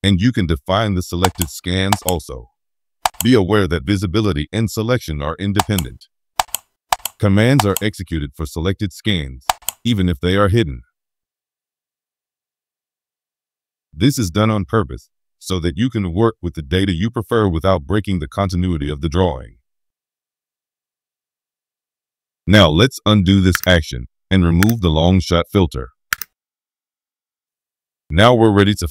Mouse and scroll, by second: 1.2 click, 1.8 click, 3.0 click, 5.5 right click, 6.3 click, 6.8 click, 7.5 click, 9.4 click, 11.1 scroll down 2, 12.7-13.0 scroll up 2, 23.5 click, 24.0 scroll down 2, 24.6 click, 25.1 scroll down 2, 25.5 scroll up 2, 26.1 click, 26.9 scroll down 1, 27.1 scroll up 1.